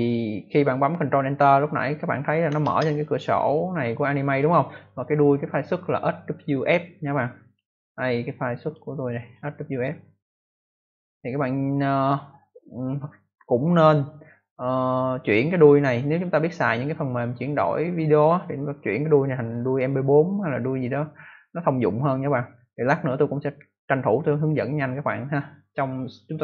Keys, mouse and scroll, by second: 2.6 ctrl+Return, 7.4 click, 8.5 click, 10.2 click.